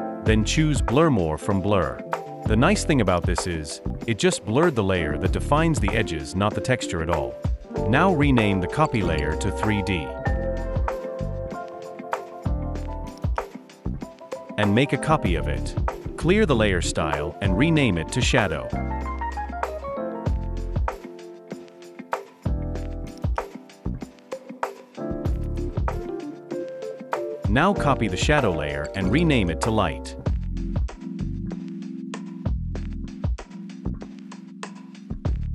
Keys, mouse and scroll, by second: 8.0 double click, 9.6-10.3 typing, 10.5 Return, 14.9 alt+click, 17.0 right click, 23.2 double click, 24.8-26.3 typing, 26.4 Return, 33.9 alt+click, 35.3 double click.